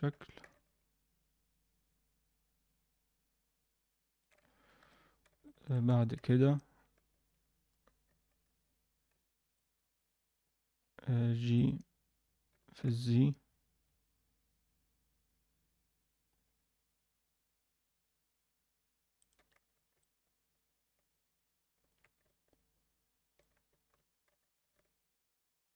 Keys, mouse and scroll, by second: 0.1 g, 4.7 KP_7, 5.4 alt+shift+middle drag, 5.8 Tab, 6.1 z, 6.5 middle click, 7.7 KP_1, 8.0 a, 9.1 b, 11.5 click, 12.5 g, 19.5 scroll down 1, 19.7 Tab, 20.0-21.8 alt+middle drag, 22.0 Tab, 22.2-23.3 middle drag, 23.9 g.